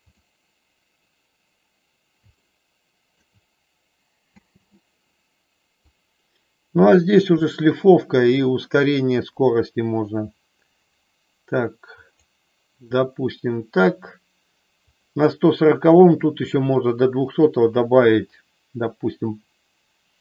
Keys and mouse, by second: 2.4 shift+middle click, 4.4 space, 5.8-12.2 drag, 14.8 click, 16.2-20.2 drag.